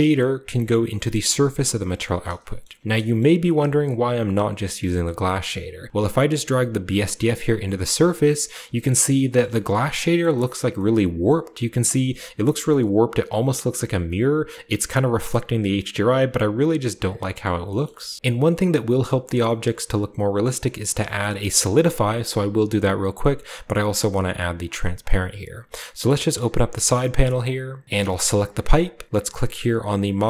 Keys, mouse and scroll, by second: 1.1-1.6 drag, 1.9-2.4 drag, 2.6-3.0 shift+middle drag, 2.8-4.1 shift+scroll up 1, 3.1-4.7 shift+middle drag, 4.1-4.7 shift+scroll up 1, 5.1-5.7 drag, 5.1 typing, 6.2-7.9 drag, 8.3-8.8 scroll down 1, 8.7 shift+middle drag, 8.9-9.3 middle drag, 9.4 shift+middle drag, 9.6-11.2 shift+scroll up 1, 9.8 middle click, 10.2 shift+middle drag, 10.5 shift+middle drag, 11.2-11.9 middle drag, 11.2-11.7 scroll up 1, 11.7-12.1 scroll down 1, 12.1-12.6 middle drag, 12.1-12.6 scroll up 1, 15.1-15.7 middle drag, 15.4-15.7 scroll up 1, 17.4 middle drag, 17.4-18.1 scroll down 6, 17.8 shift+middle click, 18.1 shift+middle click, 19.0-19.7 scroll up 1, 19.0 typing, 19.0 middle click, 19.6-21.0 middle drag, 19.7 scroll down 1, 19.7-20.9 scroll up 1, 20.9 scroll down 1, 21.1-23.2 shift+middle drag, 21.2-22.1 shift+scroll up 1, 22.1-23.7 shift+scroll up 1, 23.7 click, 24.6 click, 26.0 click, 28.1 g, 28.3 click, 30.1 click.